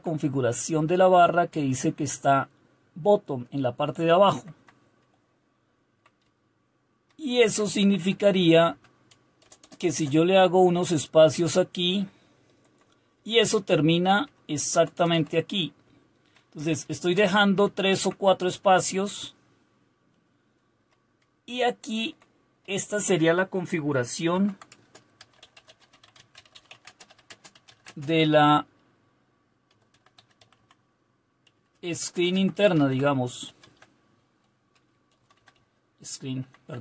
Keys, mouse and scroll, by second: 0.7 Right, 5.8 Down, 6.2 Up, 6.8 Up, 7.8 Left, 8.0 Left, 8.2 Left, 8.4 Left, 9.4 Return, 9.6 Return, 9.8 Return, 10.0 Return, 10.5 Down, 11.2-12.7 Down, 13.2 Up, 13.8-14.2 Up, 14.7 Return, 15.0 Return, 15.8 Up, 16.6 Up, 17.1 Return, 17.7 Down, 17.9 Down, 18.3 Up, 19.1 Up, 19.2 Up, 19.2-20.7 Up, 21.2 Page_Down, 21.9 Down, 22.6 Up, 24.3-28.1 typing, 29.5-36.8 typing.